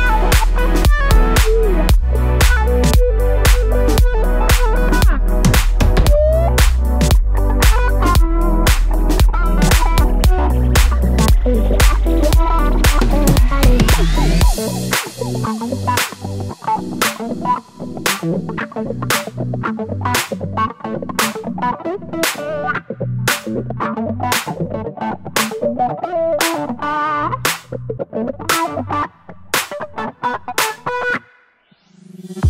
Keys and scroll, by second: 5.8 super+d, 9.9 Page_Up, 32.1 Left, 32.2 Left, 32.4 Left.